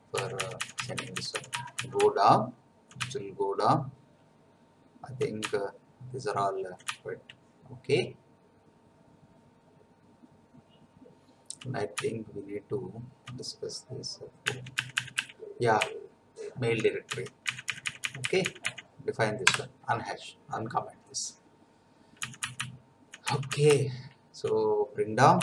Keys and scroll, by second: 0.1 Down, 1.2 Down, 2.0 Down, 2.5 Down, 3.1 Down, 8.5 Down, 9.1 Down, 9.6 Down, 14.4 Up, 15.8 Left, 17.0 Down, 17.4 Left, 19.4 Delete, 22.2 Down, 23.5 Down.